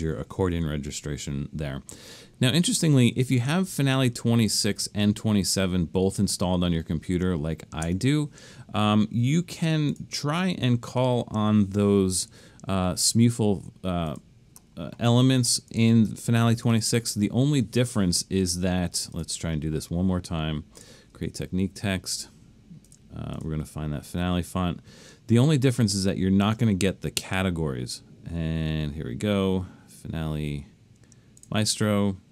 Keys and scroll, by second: 7.9 BackSpace.